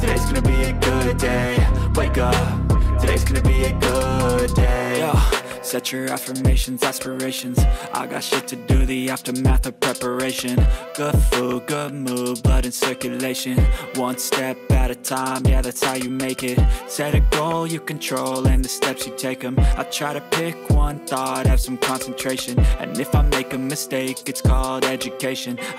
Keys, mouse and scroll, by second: 1.4 click, 2.0 click, 3.0 click, 5.1 middle click, 6.1 click, 8.1 click, 9.4-11.6 drag, 14.5 Tab, 15.6 click, 16.2 click, 17.4 alt+shift+click, 18.0 alt+shift+click, 18.6 shift+click, 19.3 click, 20.7 click, 22.0 click, 23.4 click, 24.7 click, 25.0 Tab.